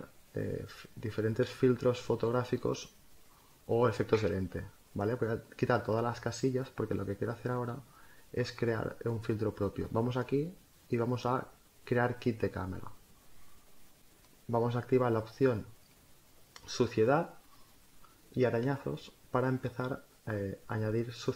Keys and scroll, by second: 1.6 space.